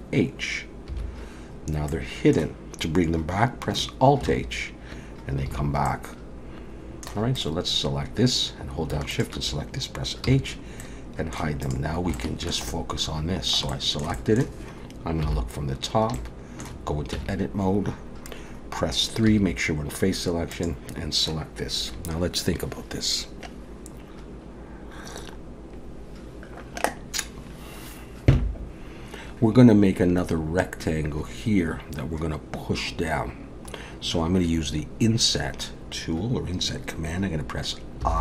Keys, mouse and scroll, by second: 0.9 h, 1.9 middle click, 4.2 alt+h, 5.5 alt+a, 5.9 middle click, 7.3 click, 9.1 shift+click, 10.3 h, 10.8 middle click, 11.6 click, 12.2 shift+middle click, 12.7 middle click, 13.7 shift+middle click, 14.2 middle click, 15.3 KP_7, 16.2 shift+middle click, 17.2 Tab, 19.3 3, 20.5 click, 38.0 i.